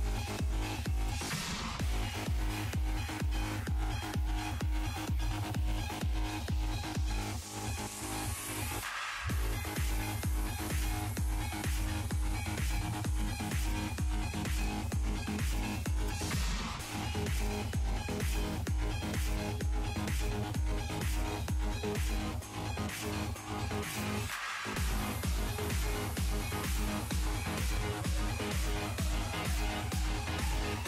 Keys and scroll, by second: 13.2 z.